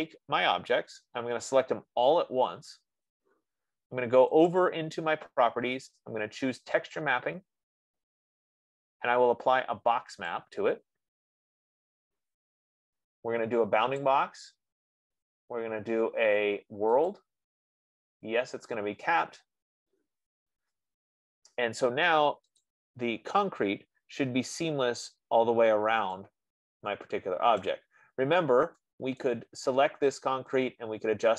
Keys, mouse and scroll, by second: 1.4 click, 4.8 click, 6.0 F15, 7.4 click, 10.7 click, 14.6 click, 17.5 click, 19.2 click, 23.0 click, 23.7-24.5 scroll, 24.5 middle click, 28.2 right click, 28.3 middle click, 28.5 middle click, 29.7 right click.